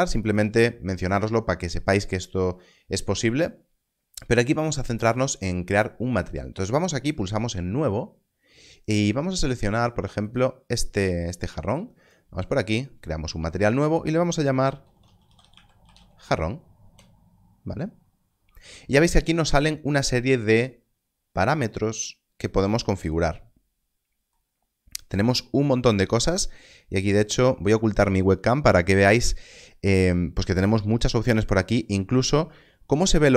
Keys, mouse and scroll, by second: 10.2 click, 14.8-15.9 typing, 16.8 Return, 30.9 Return.